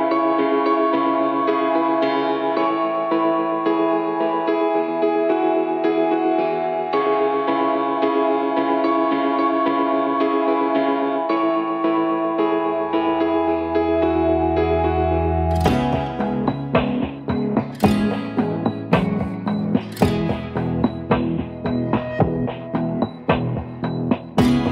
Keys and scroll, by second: 0.9 v, 2.1 ctrl+d, 4.0-5.4 typing, 6.2 ctrl+g, 6.9-8.0 typing, 9.1 ctrl+g, 9.6-11.3 typing, 13.0-20.6 typing.